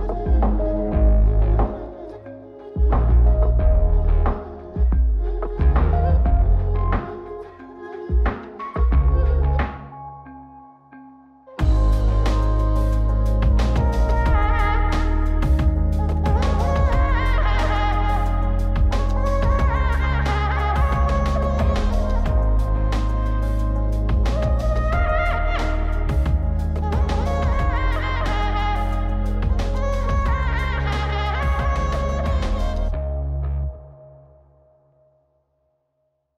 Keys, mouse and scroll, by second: 1.1-2.0 drag, 2.5 click, 3.1 click, 3.9 click, 7.0-8.0 middle drag, 8.3-8.8 scroll up 3, 8.8-11.3 middle drag, 12.3-14.2 drag, 14.6-18.0 middle drag, 18.2-19.3 scroll down 1, 19.3 scroll down 1, 19.4-21.6 middle drag, 22.5-24.3 drag, 24.6 scroll down 2, 24.9 middle click, 25.4 click, 27.1 shift+a, 30.4 middle click, 30.4 scroll down 1, 30.7 middle click, 31.5-32.5 drag, 33.4 ctrl+shift+click, 34.6 click.